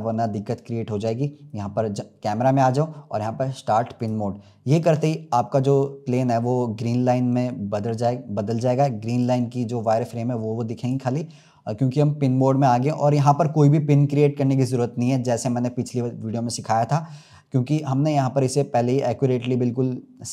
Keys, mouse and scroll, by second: 0.0 click, 3.9-5.1 drag, 5.1-8.6 scroll up 4, 8.6-20.3 drag.